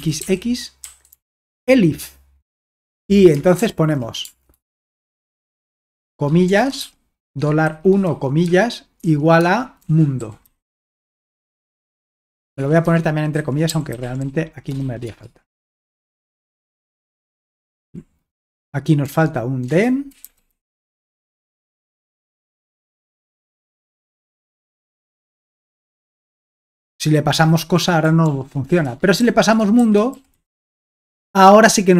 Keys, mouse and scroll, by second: 0.0-4.2 typing, 5.8-22.2 typing, 24.4 alt+Tab, 25.5 ctrl+p, 26.0 Return, 28.2 ctrl+p, 28.6-31.1 typing.